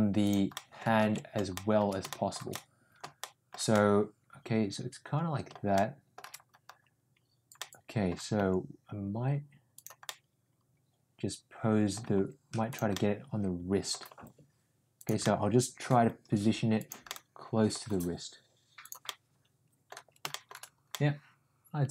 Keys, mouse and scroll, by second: 0.5-0.8 middle drag, 1.2 ctrl+z, 1.5 shift+middle drag, 2.0 shift+middle drag, 2.4-2.9 middle drag, 3.1-3.4 shift+middle drag, 3.6-6.1 middle drag, 7.5-8.0 middle drag, 8.3 g, 10.1-11.9 drag, 12.1 g, 13.0 middle click, 14.0 g, 15.3 middle click, 15.9 g, 17.1-17.8 middle drag, 17.9 g, 19.1-19.9 middle drag, 20.3 middle click, 20.9-21.9 middle drag.